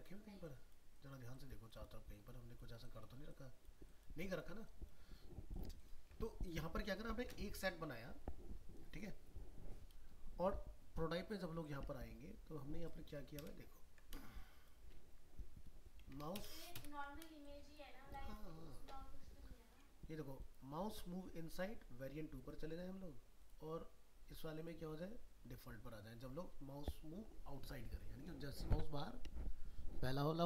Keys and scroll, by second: 5.1 ctrl+space.